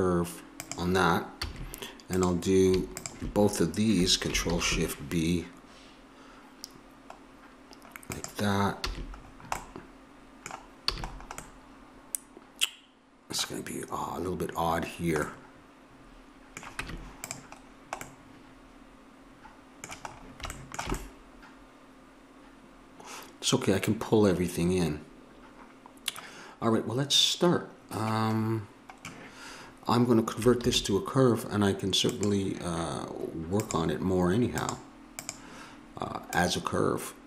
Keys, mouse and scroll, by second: 1.4 a, 8.8 a, 10.9 a, 15.3 middle click, 16.8 Tab, 21.1-22.9 middle drag, 30.6 alt+c, 33.6-37.2 drag.